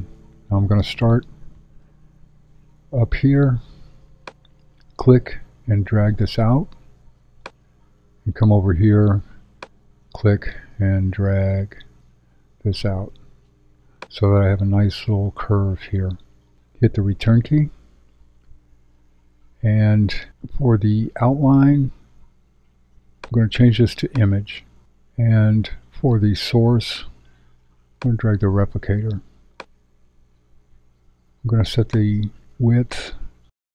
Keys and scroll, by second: 2.0 shift+z, 17.4 Return.